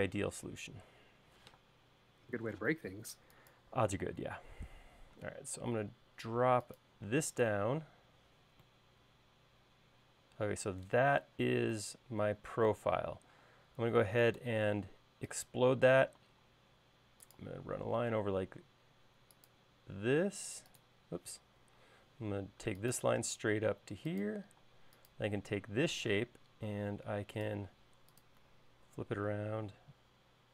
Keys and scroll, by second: 2.5 m, 13.5 space, 16.4 l, 21.7 Escape, 24.8 space, 26.3 q.